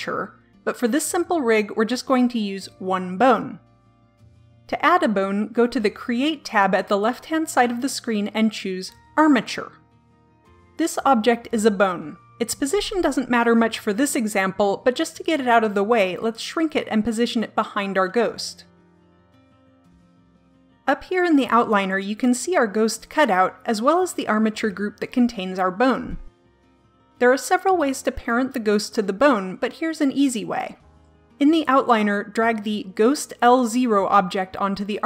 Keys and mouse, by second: 6.9-8.8 drag, 11.3-13.4 middle drag, 15.3 s, 15.8 click, 16.1 KP_1, 16.2 KP_7, 17.1 click, 17.5 KP_3, 18.4 click, 18.7 KP_7, 19.0 middle click.